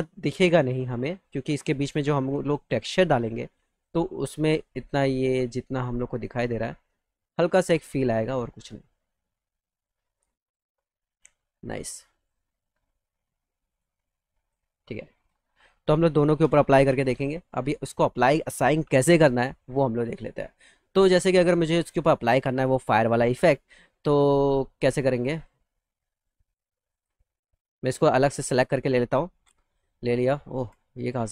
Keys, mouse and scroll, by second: 0.8 click, 1.4 right click, 2.3 click, 3.6 click, 4.4 click, 5.4 click, 6.7 click, 7.8 click, 9.0 click, 10.1 click, 11.1 click, 12.3 middle click, 13.7 click, 15.1 click, 15.6 middle click, 15.9 middle click, 16.5 middle click, 16.8 z, 17.0 alt+middle click, 17.6 middle click, 17.8 middle click, 18.3 middle click, 19.2 middle click, 19.6 alt+middle click, 20.3 middle click, 20.6 middle click, 21.0 middle click, 21.6 click, 22.9-24.4 alt+middle drag, 25.2 click, 25.6 alt+middle click, 26.7 click, 28.4 ctrl+click, 29.2 alt+q.